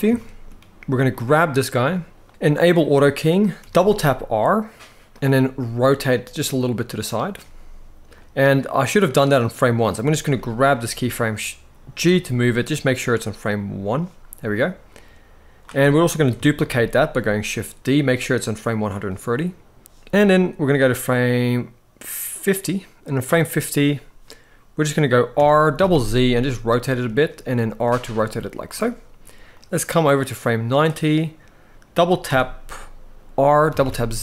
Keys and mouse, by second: 0.9 click, 3.4 r, 3.5 r, 5.3 r, 7.9-9.6 drag, 10.0-10.4 drag, 11.8 g, 13.5-15.3 drag, 15.6-16.0 drag, 16.3 shift+d, 18.6-19.1 drag, 20.4-22.9 drag, 25.1 r, 25.5 z, 25.6 z, 26.7 click, 27.6 r, 28.5 click, 29.3-30.5 drag, 32.0 r, 33.4 z, 33.6 z.